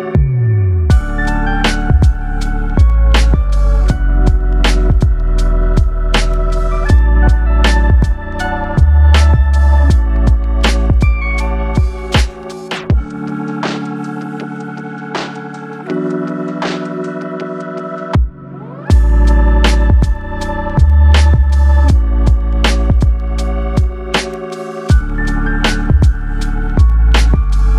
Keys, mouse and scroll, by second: 0.7 click, 2.8 click, 4.3 click, 5.2 click, 8.7 scroll down 3, 9.0 middle click.